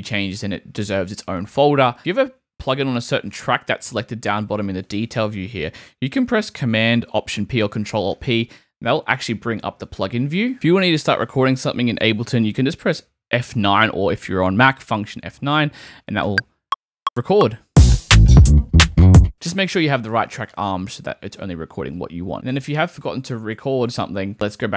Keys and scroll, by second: 3.6 Right, 8.1 alt+super+p, 8.8 alt+super+p, 16.2 F9, 19.1 super+z, 23.7 super+z.